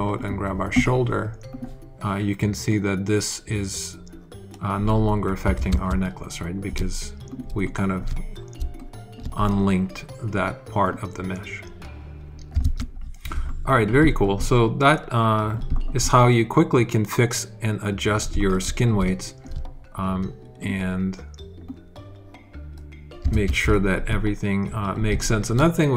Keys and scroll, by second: 5.4 super+z, 12.5 super+z, 13.2 alt+super+z, 23.2 super+z.